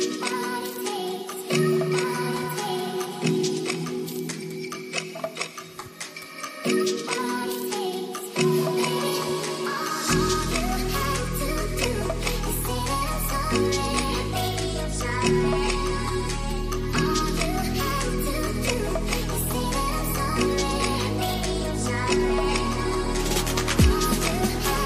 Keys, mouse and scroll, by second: 2.3 click, 2.8 ctrl+s, 4.1 drag, 4.7 click, 8.3 middle click, 8.7 shift+a, 12.4 middle click, 13.7 click, 15.5 click, 15.9 middle click, 16.8 shift+a, 23.1 click, 24.4 middle click.